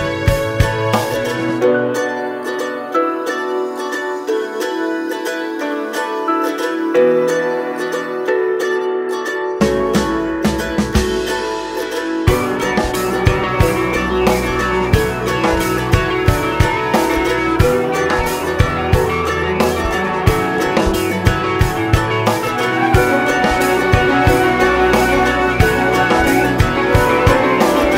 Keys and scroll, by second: 19.1 ctrl+d.